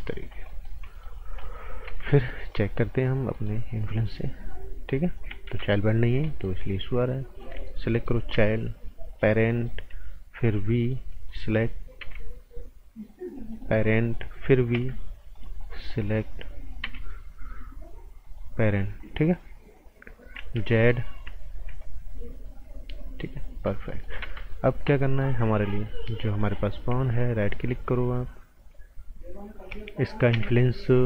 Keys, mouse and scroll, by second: 0.4 right click, 1.8 z, 2.5 click, 3.3 right click, 3.8 click, 5.5 z, 5.7 right click, 6.0 scroll up 1, 6.2 right click, 7.3 click, 7.6 right click, 8.3 p, 9.1 click, 9.4 right click, 10.3 b, 10.8 click, 11.1 right click, 12.0 p, 13.8 right click, 14.7 b, 15.3 click, 15.6 right click, 16.8 p, 18.2 click, 18.7-20.3 scroll down 1, 20.3 z, 20.7 right click, 21.5 z, 21.8 click, 23.6 scroll up 1, 23.8 right click, 24.2 ctrl+z, 24.5 right click, 26.3 click, 26.5 right click, 27.1 alt+right click, 30.3 g.